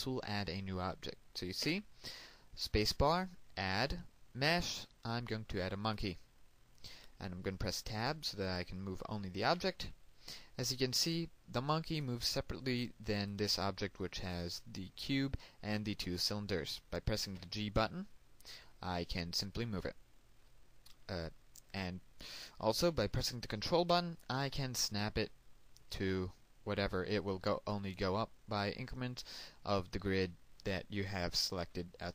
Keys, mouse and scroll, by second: 3.3 space, 7.5 click, 9.5 Tab, 11.2 g, 13.6 click, 14.8 right click, 19.0 g.